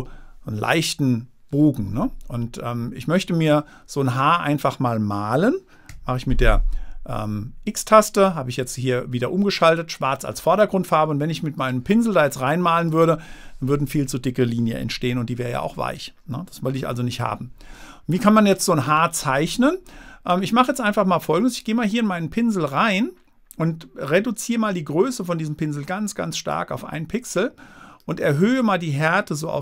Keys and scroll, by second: 6.3 x, 17.1 super+z.